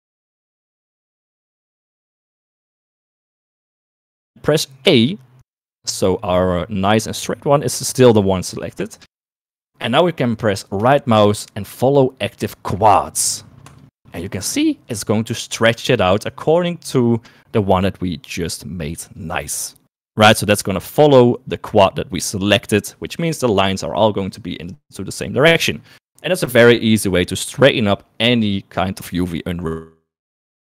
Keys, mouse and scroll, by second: 8.0 a, 11.6-15.2 right drag.